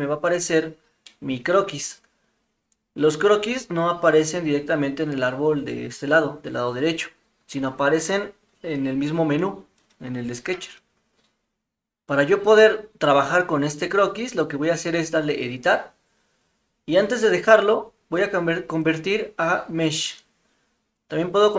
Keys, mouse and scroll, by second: 1.0 middle drag, 9.8 click, 10.7 click, 15.3 click, 18.9-19.9 drag.